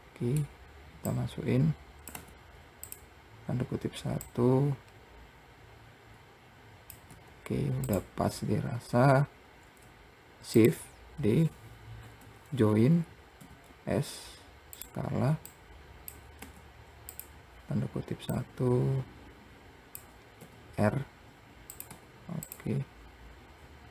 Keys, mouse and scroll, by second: 0.0-1.4 middle drag, 1.4-2.4 drag, 4.5 click, 9.5-10.3 scroll up 1, 10.9 shift+click, 12.3 ctrl+j, 13.7 s, 15.9 click, 18.6 click, 20.7 r.